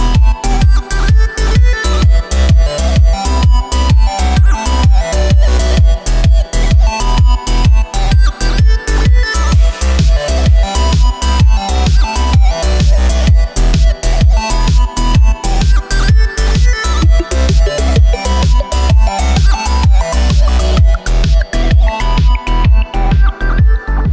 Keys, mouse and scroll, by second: 1.0 z, 2.4 g, 3.9 s, 5.4-6.1 scroll up 6, 6.1 right click, 6.5 s, 8.4-9.1 middle drag, 9.1-9.8 scroll up 2, 9.8 shift+right click, 10.1-10.6 middle drag, 10.6-11.2 scroll down 1, 11.2 shift+right click, 11.6 middle click, 11.7-12.0 scroll down 4, 12.0-12.6 middle drag, 12.6 shift+right click, 12.9-14.4 middle drag, 14.4-15.5 drag, 15.5 middle click, 16.1 s, 18.5-19.2 scroll up 3, 19.2-22.8 shift+middle drag, 23.0-24.1 drag.